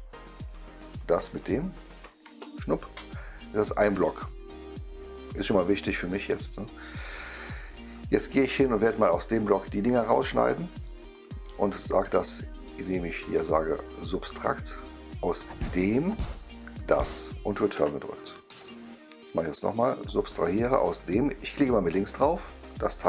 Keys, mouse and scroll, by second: 0.8 click, 1.3 click, 2.2 Return, 6.0-7.9 right drag, 10.3-10.7 right drag, 14.3 click, 15.6 click, 16.7 click, 17.6 Return, 20.0 click, 21.0 click, 22.5 click.